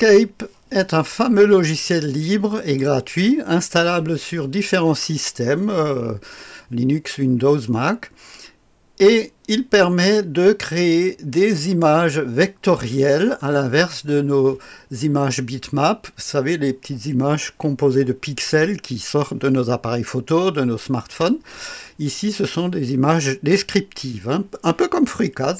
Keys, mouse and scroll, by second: 1.8 click, 2.2 right click, 2.7 click, 11.5-12.6 drag.